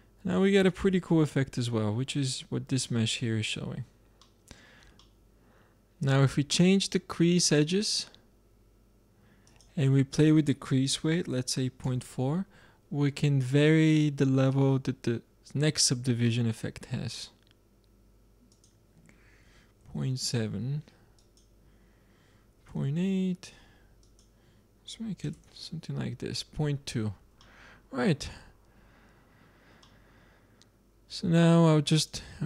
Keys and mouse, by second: 2.2-3.1 drag, 3.3-4.3 drag, 7.7-9.2 drag, 9.1 middle click, 9.4-11.3 drag, 16.2-18.2 middle drag, 18.5-20.4 drag, 21.1-22.9 drag, 23.9-25.7 drag, 27.3-29.7 middle drag, 32.2-32.4 drag.